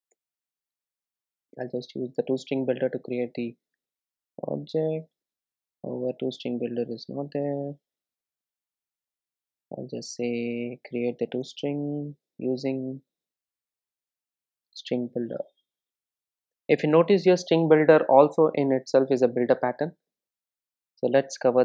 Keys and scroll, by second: 8.5 super+z, 10.0 super+n, 19.4 super+e.